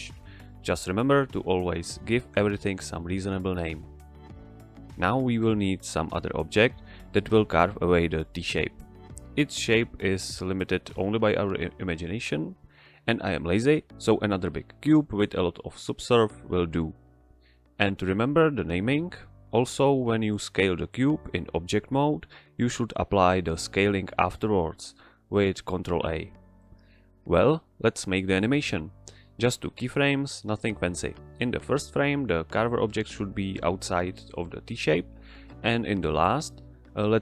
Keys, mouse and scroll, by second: 0.0 Tab, 1.2 click, 2.2-3.3 typing, 3.8 Return, 4.8 click, 5.2 shift+a, 6.0 click, 6.5 g, 6.6 z, 7.6 ctrl+click, 8.1 s, 9.3 ctrl+click, 16.4-17.7 typing, 18.2 Return, 22.7 s, 23.2 click, 24.1 ctrl+a, 25.0 click, 28.9-29.3 middle drag, 30.6 g, 31.9 click, 32.8 i, 33.3 click, 34.7 Return, 36.8 click.